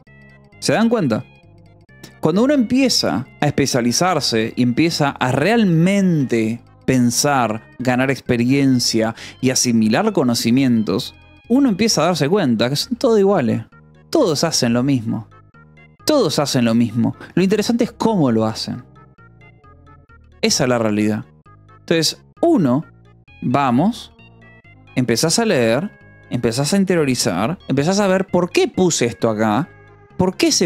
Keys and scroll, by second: 0.1 ctrl+s, 1.8 j, 4.5 k, 6.3 j, 7.3 k, 12.7 j, 14.3-15.1 typing, 16.2 Escape, 17.2 k.